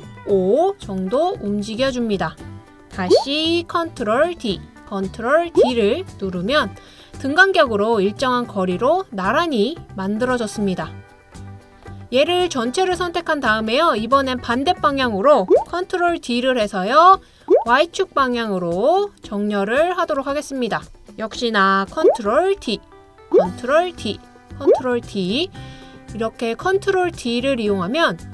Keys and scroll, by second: 4.4 super+d, 5.7 super+d, 16.1 super+d, 22.6 super+d, 24.0 super+d, 25.1 super+d.